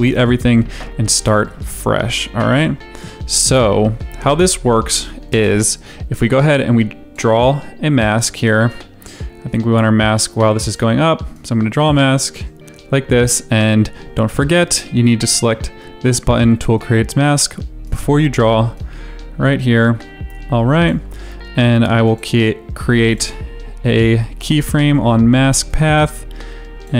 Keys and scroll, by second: 5.1 space.